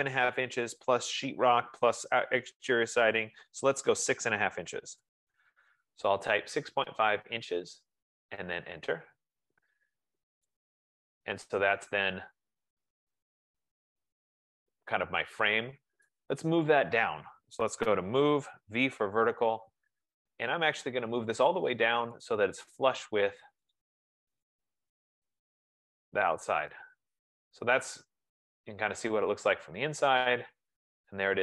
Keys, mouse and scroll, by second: 4.4-5.6 typing, 7.5 shift+', 8.4 Return, 16.6 right click, 17.0 click, 18.9-19.5 typing, 21.6-22.4 scroll, 22.4 scroll, 22.9 click, 23.4 F15, 24.1 click, 24.7 click, 25.7-26.3 scroll.